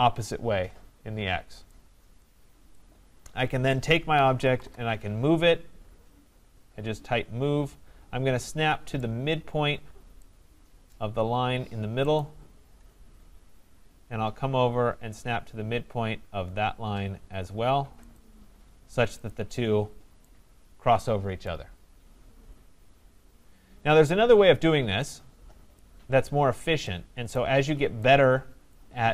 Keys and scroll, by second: 4.5 Return.